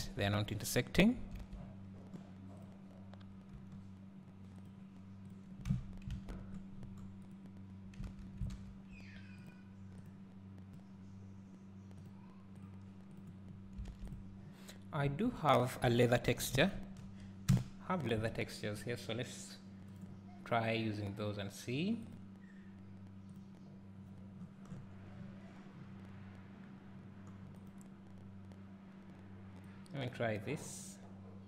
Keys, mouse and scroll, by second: 0.0 KP_0, 1.4 alt+a, 1.6 scroll up 1, 1.9 scroll down 1, 2.6 click, 3.6 g, 5.7 Tab, 6.3 a, 6.7-7.3 scroll down 1, 9.4-13.5 drag, 13.5-14.2 scroll up 1, 30.7 click.